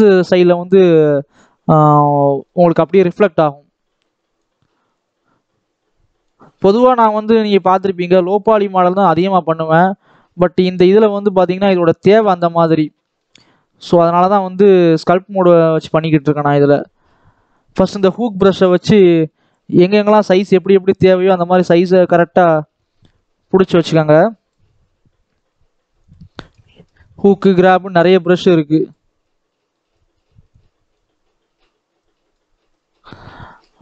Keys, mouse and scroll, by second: 2.2 scroll down 2, 2.4 middle click, 2.7-3.6 scroll up 1, 3.6-12.2 drag, 12.2-13.2 middle drag, 13.2-14.0 scroll up 1, 14.0-15.7 drag, 15.7 scroll down 2, 16.2 shift+middle click, 16.5 scroll up 1, 16.8 middle click, 17.6 click, 18.3-19.9 middle drag, 19.9-23.7 drag, 23.7 scroll down 2, 23.9 middle click, 24.5-26.0 scroll up 2, 26.0 click, 26.2 middle click, 26.9 scroll up 2, 27.5-32.9 drag, 32.9-33.3 scroll down 2, 33.3 middle click.